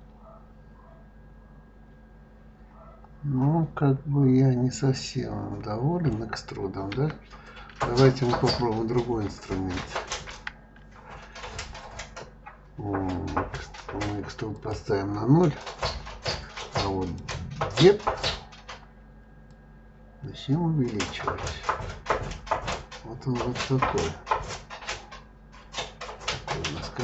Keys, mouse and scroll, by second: 6.9 Escape, 8.5 ctrl+z, 9.1 ctrl+z, 9.6 ctrl+z, 10.1 ctrl+click, 14.5-17.1 drag, 19.5-22.5 drag.